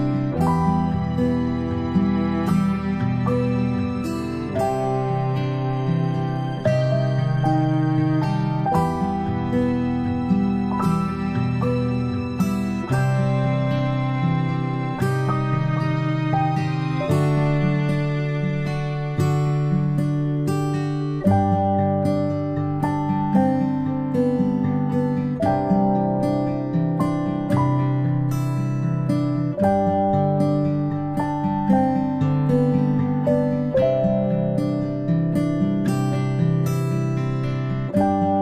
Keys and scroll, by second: 0.9-2.5 ctrl+space, 24.0 typing, 27.7 typing.